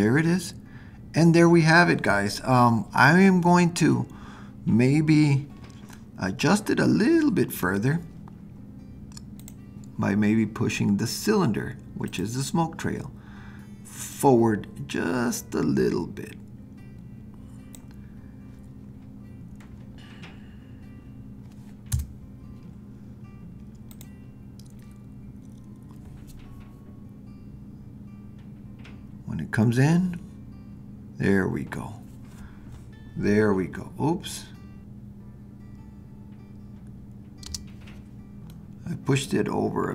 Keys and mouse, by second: 6.0-7.6 middle drag, 9.4 drag, 21.9 KP_0, 37.5 space, 38.6-39.9 middle drag.